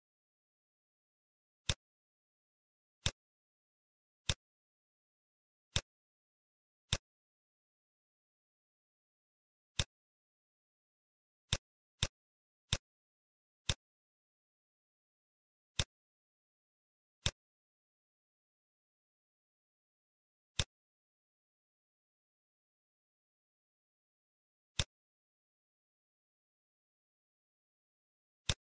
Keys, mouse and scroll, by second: 1.6 click, 5.0 shift+d, 6.8 click, 11.5 click, 12.3 click, 13.6 click, 14.8 shift+d, 17.6 click, 18.6-19.4 scroll up 5, 19.2 middle click, 20.5 click, 24.7 shift+click, 28.4 click.